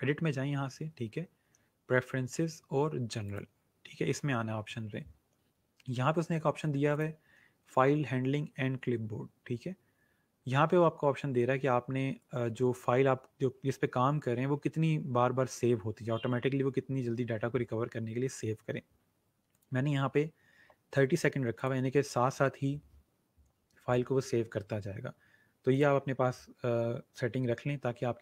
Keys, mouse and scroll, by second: 3.2 click, 6.8 click, 19.5 click, 21.5 click, 25.7 click.